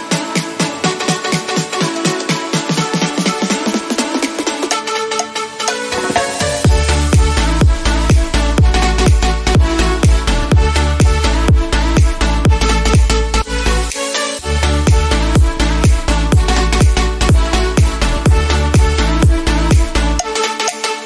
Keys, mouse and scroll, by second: 2.7-7.3 drag, 7.9 Right, 9.7 click, 10.7 b, 11.2 click, 11.2-12.9 drag, 12.9-13.2 typing, 13.8 click, 14.3-15.5 typing.